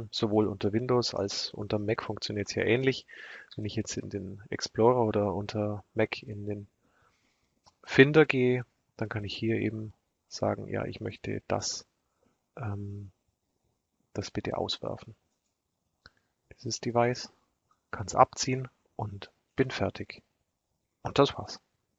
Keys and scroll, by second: 3.0 super+e.